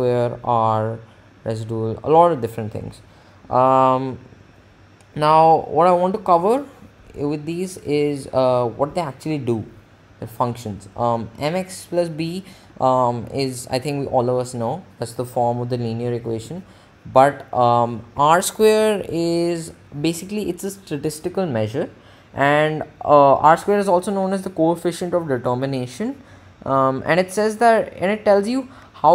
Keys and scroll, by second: 4.3 Up, 15.8 Down.